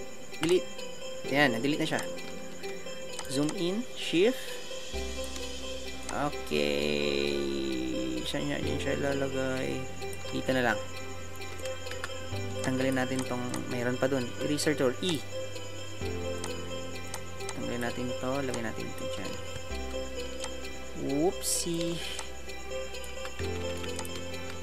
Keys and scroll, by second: 14.4 e.